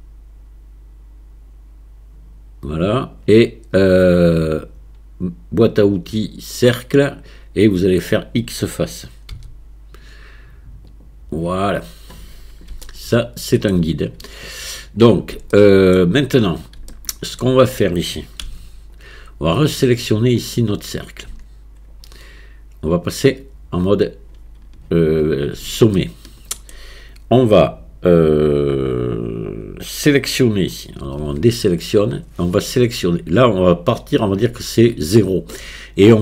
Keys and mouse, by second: 5.6-6.8 right drag, 6.8 click, 9.4 x, 12.9 shift+click, 15.6 shift+click, 16.9 shift+click, 18.5 Tab, 19.7 click, 21.3 Tab, 23.1 click, 26.0 shift+click, 31.2 a.